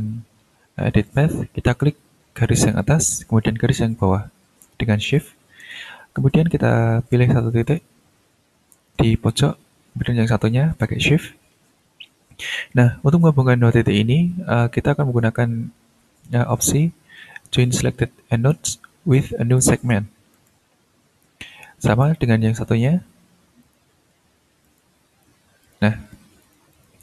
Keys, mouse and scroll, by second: 1.0 click, 2.7 click, 5.0 shift+click, 7.6 click, 11.0 shift+click, 20.3 click, 22.0 click, 23.6 shift+click, 24.6 ctrl+click, 25.6 click, 26.4-27.0 drag.